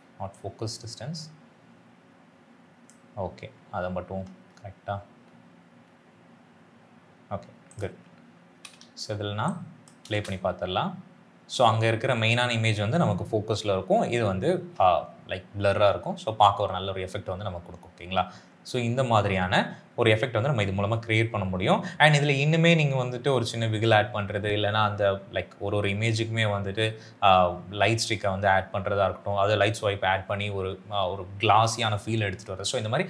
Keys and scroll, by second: 8.5 s, 8.7 s, 10.0 space.